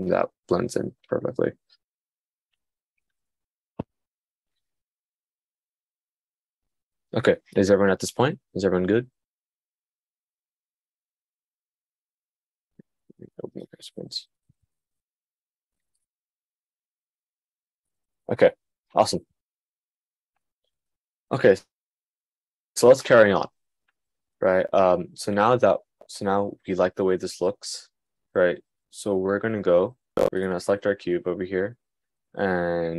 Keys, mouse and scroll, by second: 16.1 click, 20.6 click.